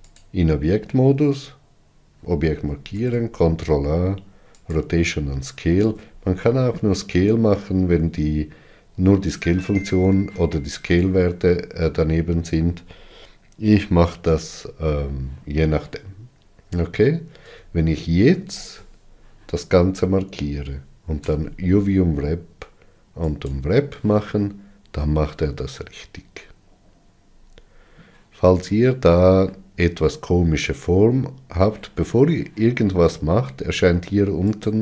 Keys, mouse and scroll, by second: 0.6 click, 5.2 ctrl+a, 17.9 Tab.